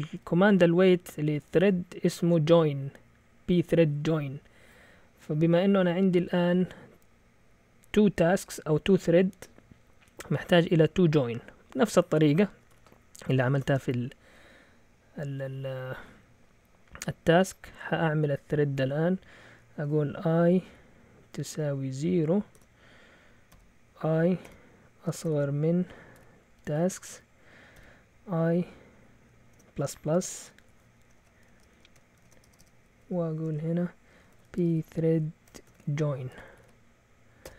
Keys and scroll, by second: 0.1 typing, 1.5 Return, 12.4-13.6 typing, 20.7-27.7 typing, 29.5 Delete, 30.6-37.5 typing, 33.0 Up.